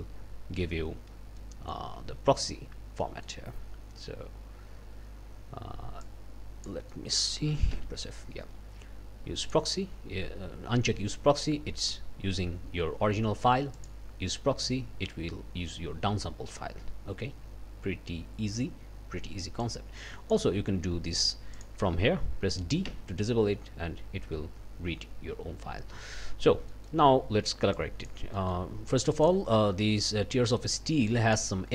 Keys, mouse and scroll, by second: 1.4 click, 2.0 space, 2.7 space, 3.0-3.4 scroll up 1, 6.0 click, 6.2-7.4 scroll up 3, 6.5 click, 6.9 click, 7.7 f, 9.4 click, 13.7 click, 19.6 click, 21.6 click, 22.9 d, 26.3 d, 26.7 click, 27.8 click, 28.3-29.4 drag, 31.1 click.